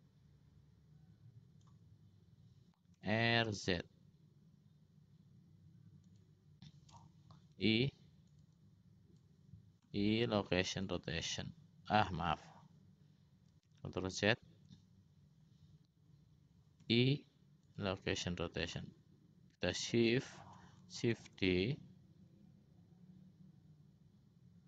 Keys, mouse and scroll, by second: 3.4 r, 7.7 i, 8.8 click, 10.0 i, 10.3-11.6 drag, 14.2 ctrl+z, 18.1 i, 19.0-20.3 drag, 21.5 shift+d.